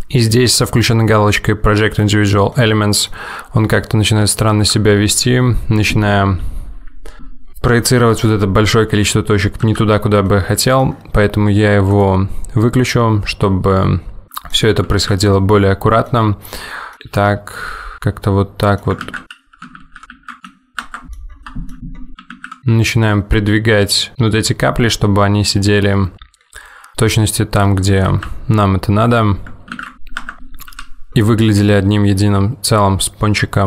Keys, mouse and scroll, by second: 2.6 middle click, 3.7 g, 5.2 middle click, 9.7 ctrl+z, 10.3 middle click, 12.0 click, 14.9 middle click, 15.0 alt+z, 15.5 middle click, 16.7 middle click, 17.1 g, 17.9 middle click, 19.2 ctrl+z, 19.6 middle click, 19.8 alt+z, 20.0 ctrl+g, 21.1 middle click, 21.3 scroll down 2, 21.5 middle click, 21.9 scroll up 2, 22.1 middle click, 22.4 alt+z, 22.6 middle click, 26.1 g, 30.9 g.